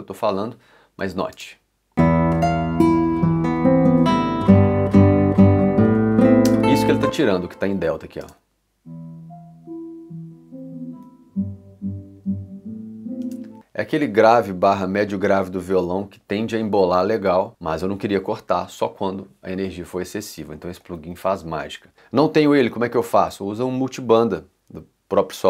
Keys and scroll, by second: 1.3 space, 6.5 space, 8.2 space, 13.2 space, 20.9 i.